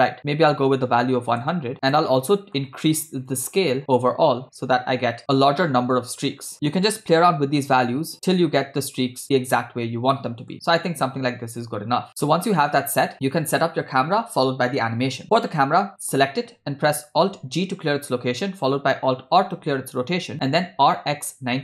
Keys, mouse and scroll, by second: 0.2-1.5 drag, 1.3 0, 1.9 scroll down 3, 1.9 middle click, 3.3-6.5 drag, 6.6-8.1 drag, 10.1 middle click, 11.1 scroll up 2, 11.6 scroll down 1, 15.3 click, 17.7 alt+g, 19.7 alt+r, 20.8 r.